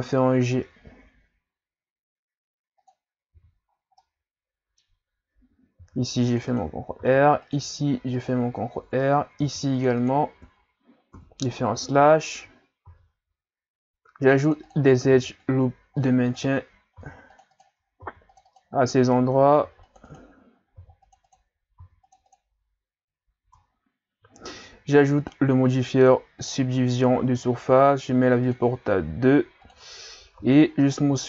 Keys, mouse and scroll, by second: 3.4 z, 3.8 scroll down 1, 4.0-5.8 middle drag, 5.8 ctrl+r, 7.0 ctrl+r, 9.5 ctrl+r, 10.3 Tab, 11.1 KP_Divide, 11.8 Tab, 12.9 ctrl+r, 15.1 ctrl+r, 17.0 ctrl+r, 18.0 ctrl+r, 19.6 ctrl+r, 20.8 ctrl+r, 21.8 ctrl+r, 23.4 Tab, 25.2-28.2 drag, 28.5-30.4 drag, 30.4 w.